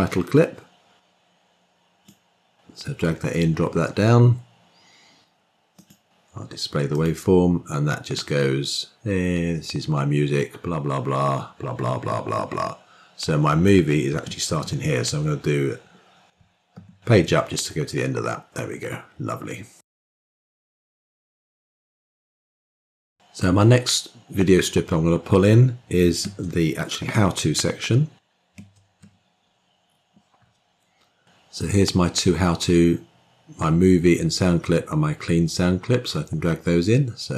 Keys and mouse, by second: 5.7 click, 6.8 click, 8.0-13.7 drag, 16.6 Page_Up, 28.9 middle click.